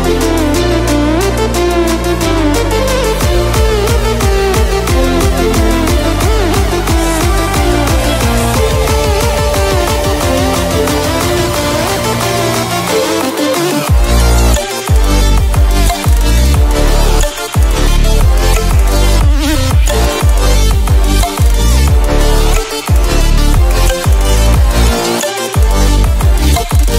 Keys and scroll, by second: 9.2 ctrl+-, 9.4 ctrl+-, 15.2 ctrl+e, 16.4 ctrl+z, 18.2 ctrl+e.